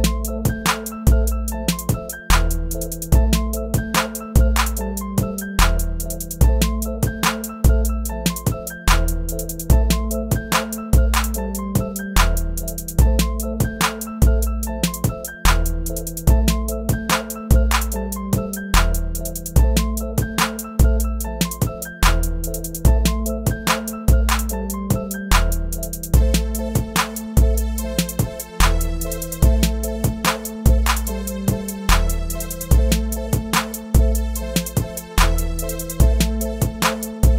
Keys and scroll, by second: 29.5 Return, 33.1 Return.